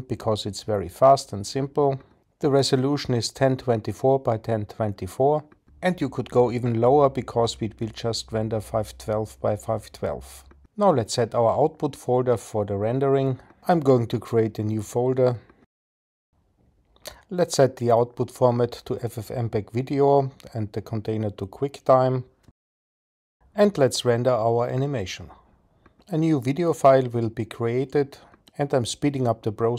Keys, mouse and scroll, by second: 12.6 click, 18.0-19.2 drag, 24.6-29.7 drag.